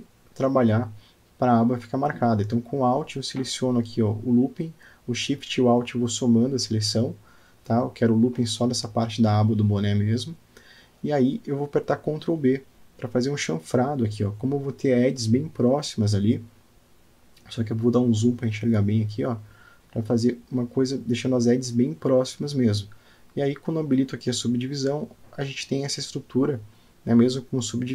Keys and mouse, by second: 1.4-2.9 middle drag, 3.2 click, 5.3 alt+click, 6.2 alt+shift+click, 11.0 alt+middle click, 11.6 alt+click, 12.0-13.7 middle drag, 14.6 ctrl+b, 20.4 shift+middle click, 21.6 ctrl+b, 26.3 click, 26.7 Tab, 27.6-27.9 middle drag.